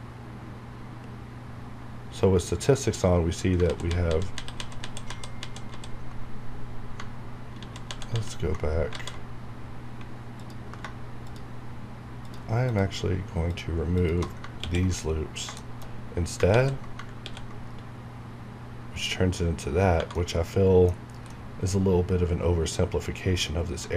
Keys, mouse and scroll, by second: 1.4 scroll down 1, 3.7 ctrl+z, 6.2 scroll down 1, 7.0 scroll up 1, 7.5 ctrl+z, 9.6 scroll down 1, 10.4 alt+click, 14.5 ctrl+x, 15.1-15.4 ctrl+scroll down 1, 15.6 ctrl+shift+middle click, 16.0 ctrl+scroll up 1, 16.5 ctrl+z, 17.1 x, 19.5 scroll down 1, 20.0 Tab, 20.0 Right, 20.1 middle click, 21.0 scroll up 1, 21.3-23.9 middle drag.